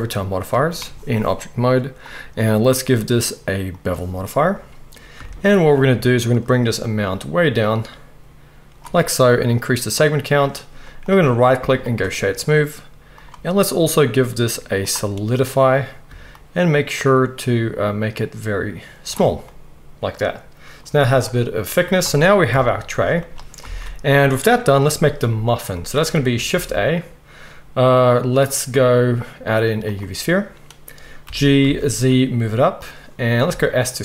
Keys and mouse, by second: 0.4 click, 0.5-2.0 middle drag, 2.0-11.2 drag, 11.2-18.1 middle drag, 22.5 KP_1, 23.6 alt+a, 24.1-32.8 shift+middle drag, 26.5 shift+a, 31.2 g, 32.8-34.0 right drag, 33.5 s.